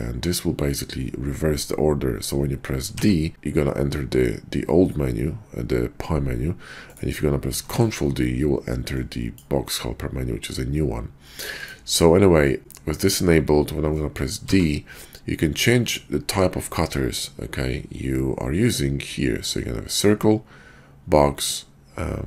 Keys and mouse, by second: 2.9 d, 7.7 ctrl+d, 11.6-14.4 drag, 14.4 d.